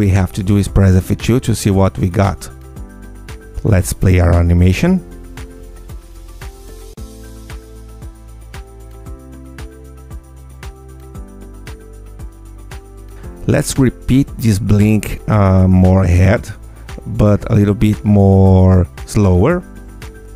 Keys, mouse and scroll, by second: 3.6 click, 4.1 Tab, 4.6 space, 7.0 click, 9.8 space, 10.2 scroll down 1, 10.8 click, 11.2 space, 13.3 space, 15.9-17.8 drag, 20.0 ctrl+F2.